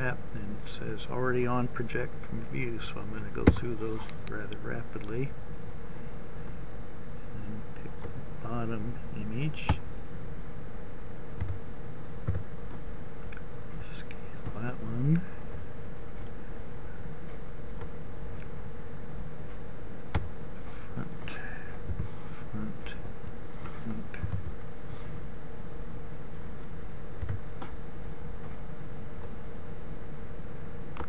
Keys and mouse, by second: 12.1 a, 12.5 s, 21.7 KP_1, 24.3 u, 27.7 a.